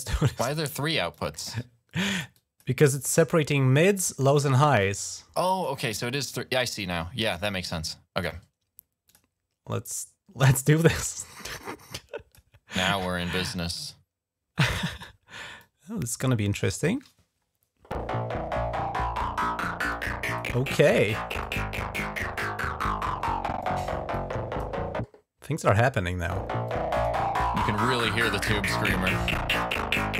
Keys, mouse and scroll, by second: 1.0 click, 2.2 click, 2.8 click, 3.4 click, 4.1 click, 4.8 click, 5.6 click, 7.7 click, 8.1 right click, 8.9 click, 9.0 right click, 9.7 click, 10.6 right click, 11.0 click, 11.1 right click, 11.4 click, 12.2 right click, 12.3 click, 14.7 click, 15.5-16.6 drag, 16.4 right click, 19.2 click, 19.8 click, 20.6 click, 21.2 click, 22.8 click, 23.5 click, 24.0 click, 26.5 click, 27.8 click, 29.4-30.1 drag.